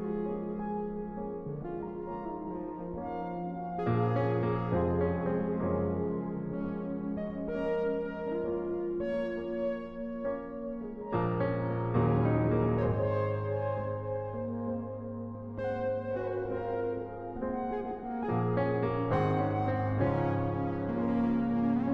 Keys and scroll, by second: 0.1 space, 1.5 space, 6.2 space, 11.3-13.3 typing, 19.4 space.